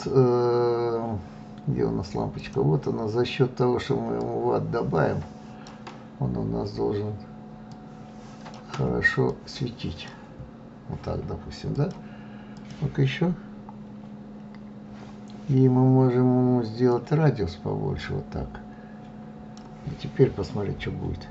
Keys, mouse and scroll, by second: 1.0 click, 2.9-10.3 drag, 11.2 click, 15.6-21.3 drag.